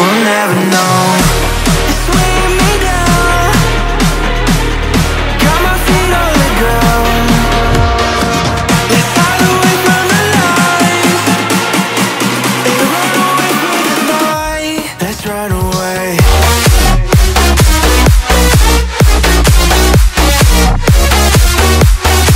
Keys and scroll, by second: 6.1-10.4 typing, 7.5 Return.